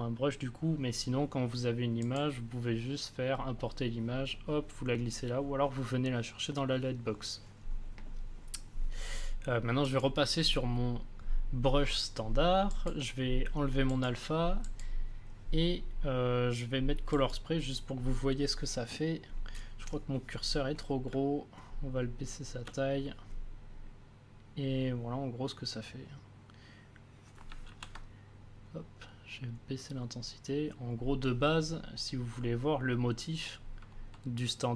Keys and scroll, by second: 21.1 space, 27.6 ctrl+z.